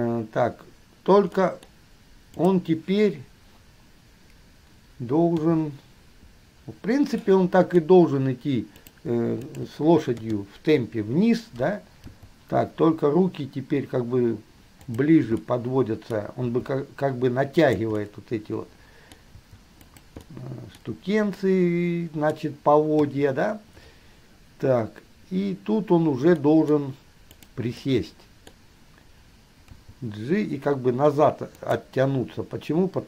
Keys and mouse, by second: 1.6-2.7 middle drag, 2.7 click, 5.6 KP_3, 7.4-8.6 middle drag, 8.9 click, 9.7 shift+click, 10.3 KP_3, 12.3 g, 15.7-16.7 middle drag, 16.7 g, 18.3-19.3 middle drag, 19.8 g, 20.6 middle click, 21.7-22.6 middle drag, 23.2 KP_3, 26.7 middle click, 27.4 middle click, 28.1-29.8 middle drag, 29.8 g.